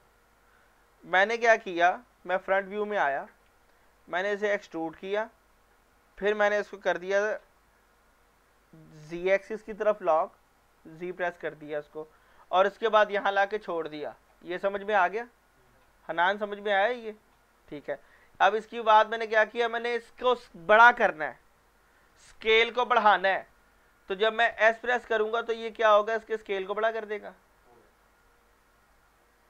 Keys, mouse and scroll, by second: 4.6 e, 9.1 z, 13.5 click, 23.1 scroll down 1, 23.4-24.0 middle click, 24.8 s, 26.5 click.